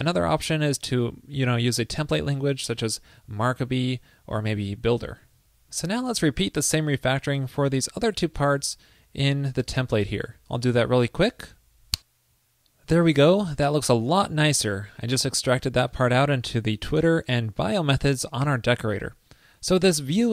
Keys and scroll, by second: 5.0 super+Right, 5.1 super+s.